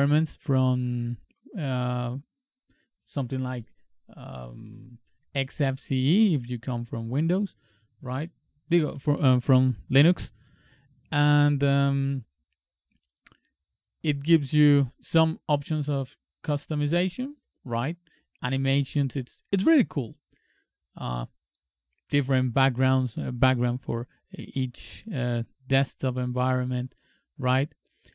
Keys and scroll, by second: 9.2 alt+1.